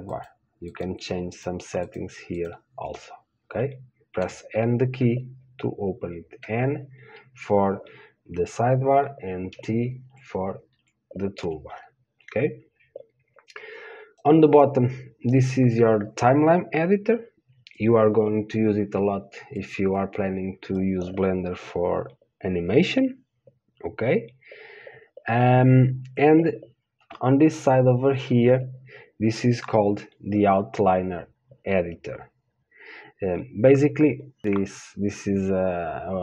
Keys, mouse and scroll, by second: 4.5 click, 4.5 n, 5.2 n, 6.7 n, 9.8 t, 10.3 t, 11.0 t, 11.7 t, 14.6-34.4 drag.